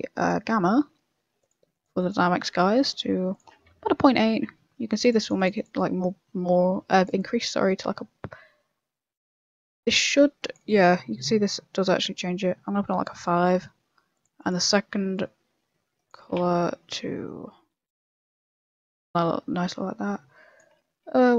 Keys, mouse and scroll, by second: 0.0 click, 1.4 click, 1.7 click, 1.9 click, 3.3 click, 3.7 z, 5.0 click, 5.2 click, 5.5 click, 5.7 click, 7.1 click, 10.6 click, 11.4 click, 12.0 click, 15.2 click, 16.3 click.